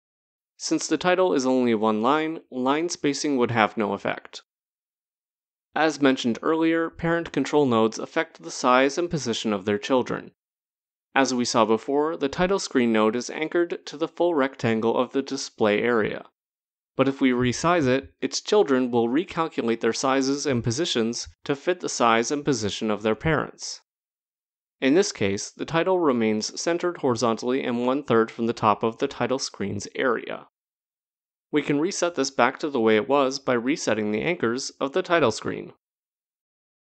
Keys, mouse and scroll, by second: 0.3 click, 7.1 click, 13.6 click, 14.7 click, 16.2 click, 25.6 click, 31.0-31.9 scroll, 31.9 click, 34.5 click, 35.8 scroll, 35.9 click.